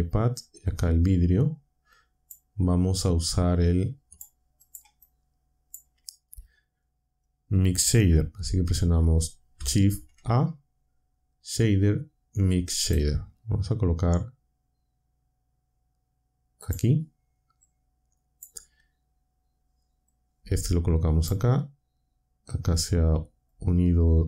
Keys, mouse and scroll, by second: 0.6-2.4 drag, 3.1-4.3 drag, 4.6 click, 5.0-5.8 drag, 9.5 shift+a, 12.8 click, 16.6 click, 17.6-18.5 drag, 20.1-21.4 drag, 23.5-24.2 drag.